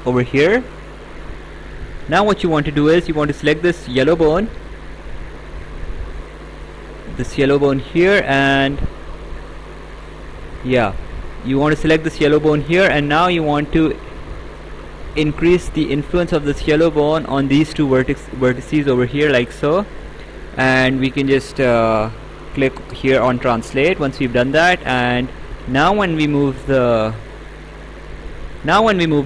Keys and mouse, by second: 0.8 click, 2.0 right click, 4.3 click, 7.3 click, 8.8 click, 10.0 click, 13.1 click, 17.4 click, 18.9 right click, 23.8 click, 25.5 click.